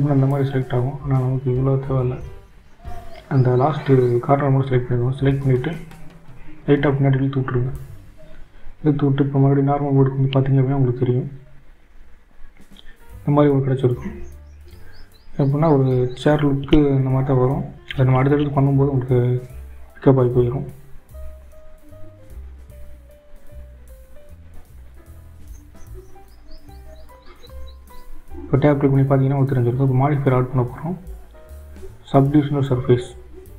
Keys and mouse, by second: 1.6-2.9 drag, 4.7 g, 11.9 shift+z, 14.8-21.8 drag, 25.6-27.1 drag, 28.3 Tab, 30.3 click, 31.5-33.5 drag.